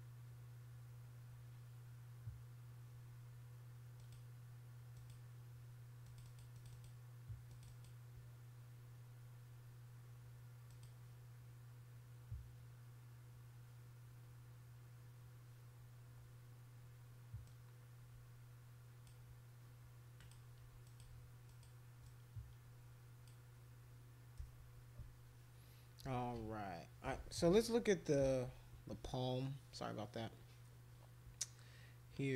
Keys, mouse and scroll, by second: 32.1 click.